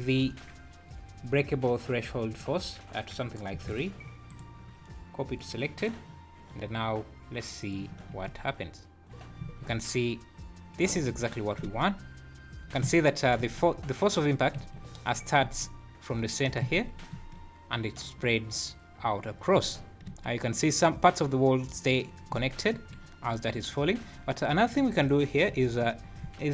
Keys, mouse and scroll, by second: 2.3 click, 4.3 right click, 5.8 click, 7.7 click, 8.1 space, 10.9 Escape, 11.6 space, 12.8 Escape, 13.4 space, 14.5 Escape, 15.4 space, 16.6 Escape, 17.1 space, 19.6 Escape, 20.0 space, 22.7 Escape, 24.9 click, 25.4 `.